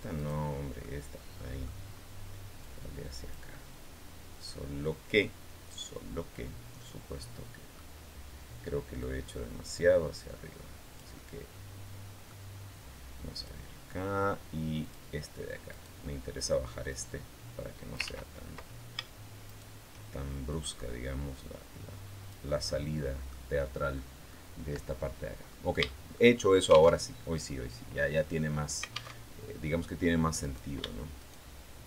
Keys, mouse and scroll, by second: 0.0 right click, 0.6-1.6 middle drag, 1.8 scroll up 1, 2.4 click, 3.4-7.7 middle drag, 8.8-12.1 drag, 11.0-12.1 middle drag, 12.1 scroll up 1, 13.2 click, 14.6 click, 15.5 right click, 16.7-18.0 drag, 17.8 ctrl+z, 19.2 shift+right click, 20.3-23.2 drag, 23.4 scroll up 1, 23.8 middle click, 25.3 scroll down 2, 25.6 shift+middle click, 26.8 alt+Tab, 28.9 alt+Tab, 30.2 middle click, 31.0 shift+middle click.